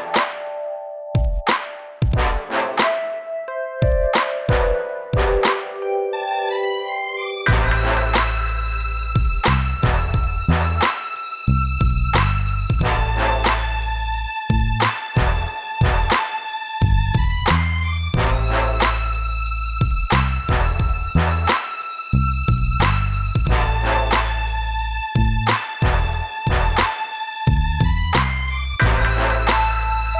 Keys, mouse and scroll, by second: 3.6 Return, 3.6 scroll up 1, 5.1 scroll down 1, 6.0 click, 7.1 click, 7.7 click, 8.0 right click, 9.5 click, 11.3 click, 17.3 click, 22.4 click, 22.5 click, 23.0 click, 23.1 double click, 25.0 middle click, 25.9 click, 26.0 click.